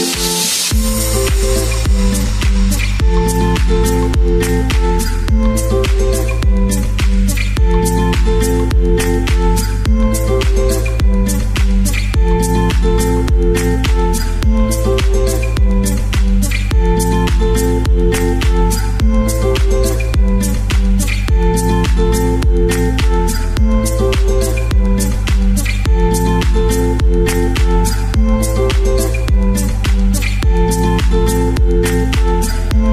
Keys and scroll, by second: 23.0 super+x, 26.0 super+v.